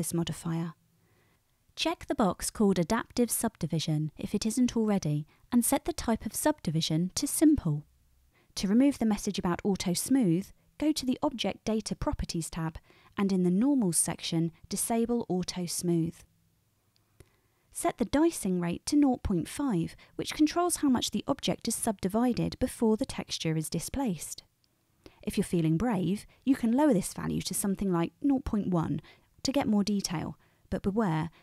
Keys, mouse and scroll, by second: 6.9-11.5 middle drag, 11.5 click, 12.0-12.8 middle drag, 12.8-14.2 drag, 14.2-20.6 middle drag, 20.6-31.4 drag.